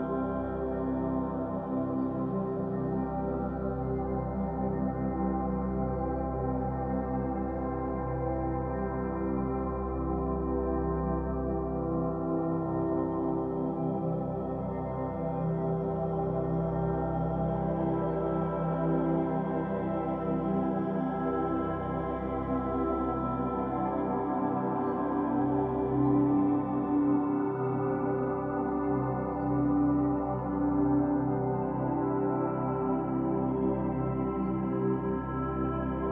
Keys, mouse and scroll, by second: 1.4 click, 3.0-6.0 drag, 6.4-9.4 drag, 10.8 scroll down 4, 12.3 click, 12.7-13.9 scroll down 4, 13.9 click, 15.1-15.5 scroll up 3, 15.5-19.2 shift+middle drag, 21.2-24.2 drag, 25.0 click, 28.1 click, 29.8 click, 31.6-33.8 drag, 33.8-36.1 shift+middle drag.